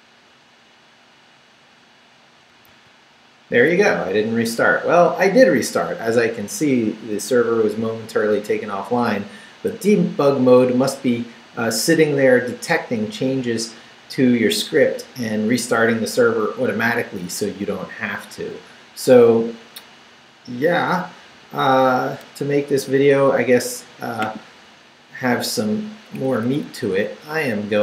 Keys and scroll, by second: 2.7 super+r, 25.9 Up.